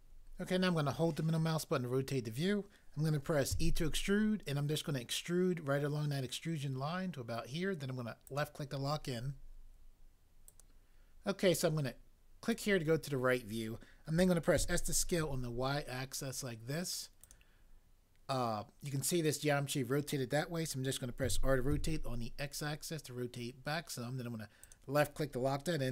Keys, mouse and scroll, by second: 3.6 e, 14.6 s, 15.2 y, 21.2-21.7 typing.